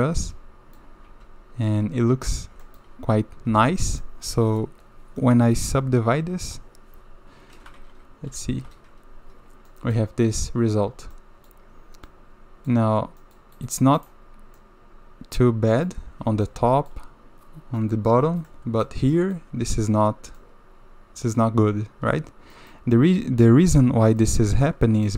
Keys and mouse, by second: 2.6 shift+middle drag, 3.5 shift+z, 4.0-5.2 middle drag, 8.3 ctrl+2, 9.7 middle drag, 11.1-11.5 middle drag, 12.1-12.7 middle drag, 13.2 middle drag, 13.5 middle click, 14.6-15.4 middle drag, 15.7 middle drag, 16.5-16.9 middle drag, 18.5-18.8 middle drag, 19.1 middle drag, 20.4-21.4 middle drag, 22.5 middle click, 24.2-25.1 middle drag.